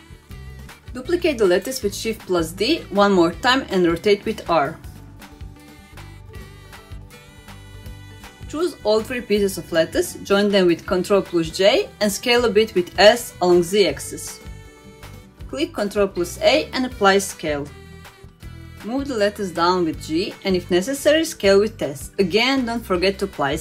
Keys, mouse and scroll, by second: 0.3-1.6 middle drag, 1.9-2.9 middle drag, 3.2 shift+d, 4.8 r, 8.4-9.3 middle drag, 9.5 middle click, 10.3 middle click, 11.3 shift+click, 11.7 shift+click, 13.2 ctrl+j, 14.5 s, 16.1 middle click, 16.9 ctrl+a, 18.2-18.6 middle drag, 18.7 middle drag, 19.1 g, 21.3 s, 22.9 click.